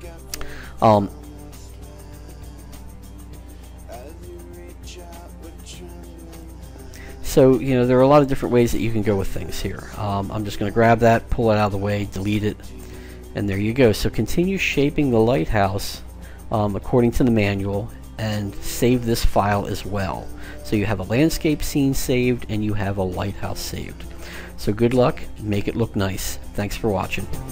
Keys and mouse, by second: 1.8 alt+z, 3.9-6.6 drag, 10.3 g, 12.0 Delete, 13.3 middle click, 15.2-20.2 middle drag.